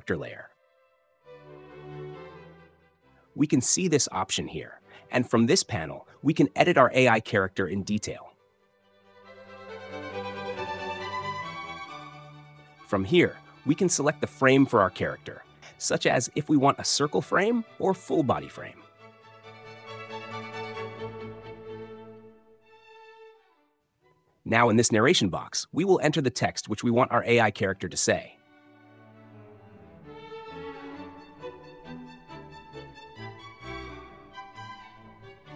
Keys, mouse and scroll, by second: 4.8 click, 20.8-21.8 drag, 24.7-25.7 drag, 27.5-35.4 typing.